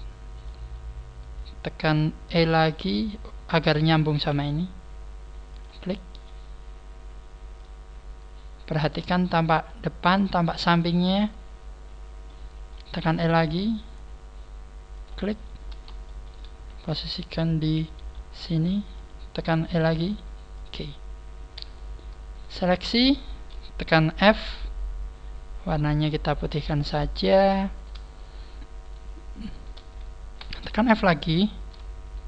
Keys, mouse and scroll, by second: 0.2 shift+middle click, 2.3-2.6 scroll down 2, 2.6 middle click, 4.0 middle click, 4.2 e, 5.6 click, 5.8 middle click, 7.5 click, 7.7 middle click, 7.7 click, 11.2 click, 11.8 scroll down 1, 12.2 middle click, 13.0 e, 14.9 click, 15.4 scroll down 1, 16.0 scroll down 1, 16.0 shift+middle click, 16.6-17.1 scroll up 6, 17.9 g, 19.0 click, 19.8 e, 20.6 click, 21.6 scroll up 2, 22.3 shift+right click, 22.6 shift+right click, 23.1 shift+right click, 24.2 f, 25.8 click, 27.0 click, 27.7 right click, 28.2 shift+right click, 28.8 shift+right click, 29.4 shift+right click, 30.4 f, 30.8 shift+middle click, 31.6 right click, 32.0 shift+right click.